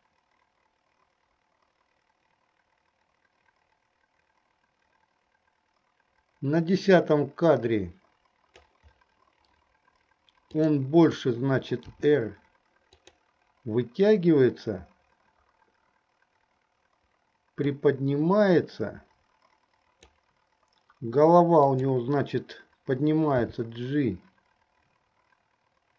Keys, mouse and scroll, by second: 10.6 click, 12.1 r, 17.7 click, 18.2-20.4 drag, 21.8 click, 23.5 g.